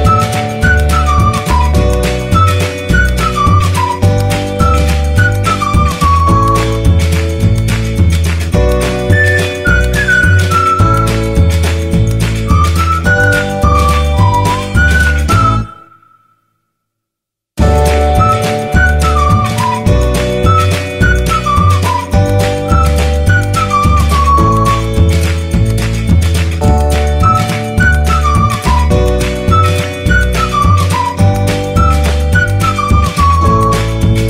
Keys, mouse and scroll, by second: 2.1 click, 11.2 click, 19.6-24.3 scroll down 1, 27.7-34.2 drag.